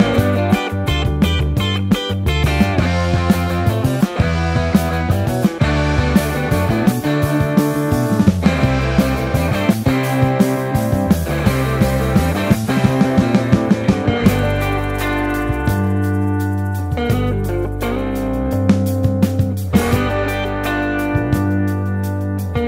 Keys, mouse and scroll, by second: 0.1 Tab, 0.6 Tab, 0.6 Tab, 1.0 ctrl+r, 1.6 Tab, 2.3 Tab, 3.3 ctrl+r, 3.6 Tab, 4.4 Tab, 4.6 ctrl+r, 5.8 ctrl+z, 6.6 KP_1, 9.8 Tab, 10.2 Tab, 10.6 KP_1, 11.3 shift+a, 12.4 Tab, 12.4 s, 13.0 Tab, 14.2 s, 14.2 KP_1, 14.8 ctrl+2, 15.6 KP_1, 16.8 s, 16.8 y, 17.8 KP_1, 18.2-21.2 drag, 21.2 Tab.